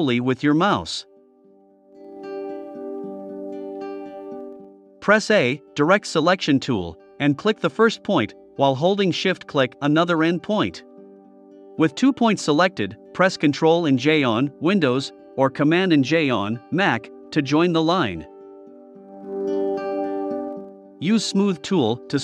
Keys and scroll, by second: 4.2 a, 9.0 super+j.